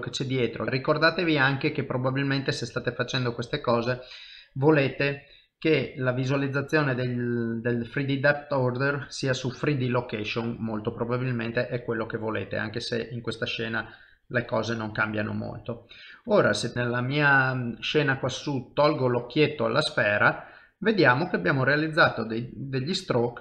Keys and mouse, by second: 2.0 middle click, 3.9 click, 4.8 middle click, 5.8 click, 6.2 middle click, 6.9 l, 7.8 click, 9.9 middle click, 11.8 ctrl+middle click, 12.5 middle click, 13.7 ctrl+click, 14.4 middle click, 16.2 ctrl+Tab, 19.4 click, 20.0 middle click.